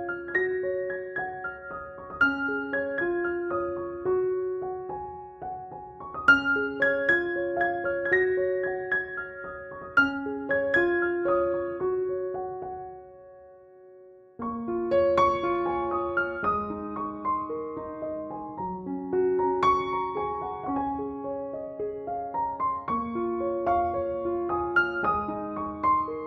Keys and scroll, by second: 1.9 shift+Tab.